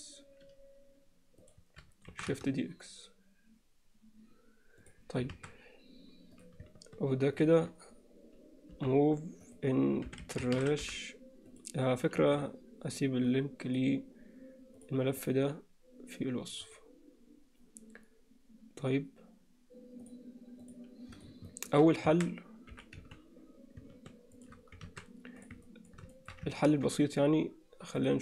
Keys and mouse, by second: 0.8 shift+d, 3.8 shift+d, 5.4 alt+a, 8.7 m, 12.2 ctrl+s, 14.8 drag, 20.6 drag, 21.2 click, 21.5 alt+shift+middle click, 22.1 a, 22.8 g, 24.9 alt+a, 25.7 alt+middle click, 26.2 shift+middle drag, 26.6 ctrl+middle drag.